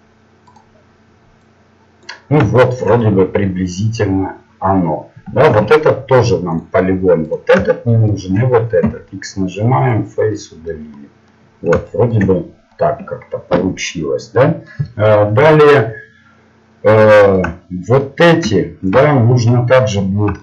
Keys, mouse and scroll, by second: 1.4 click, 6.6 ctrl+Tab, 7.3-9.9 right drag, 9.9 x, 10.4-11.5 middle drag, 12.1 middle click, 13.4-20.4 middle drag.